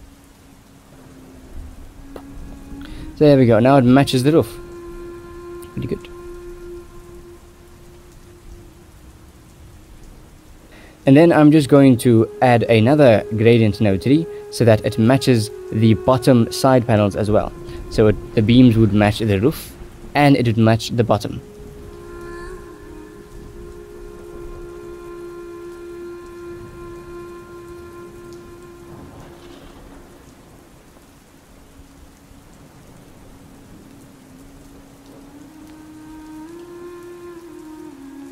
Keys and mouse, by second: 1.7 ctrl+z, 4.7 shift+middle click, 5.4 shift+middle click, 12.9 shift+middle click, 13.6 ctrl+s, 14.4 shift+middle click, 18.2 click, 18.9 click, 19.8 g, 20.4 shift+middle drag, 21.0 ctrl+s, 26.3 shift+middle drag, 27.3 middle click, 27.6-28.2 drag, 28.4 shift+d, 29.9 middle click, 30.7 click, 31.0 middle click, 31.3 g, 32.1 middle click, 33.2 click, 33.8-34.2 drag, 34.8-35.6 drag, 36.5-37.4 drag.